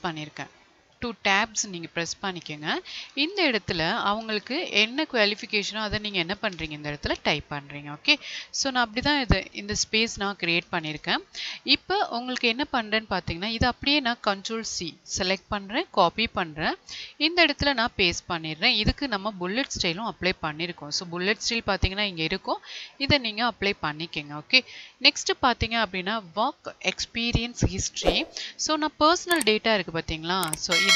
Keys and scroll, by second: 2.0 Tab, 4.7 space, 5.3 space, 6.5 space, 10.8 space, 15.6 ctrl+c, 18.5 ctrl+v.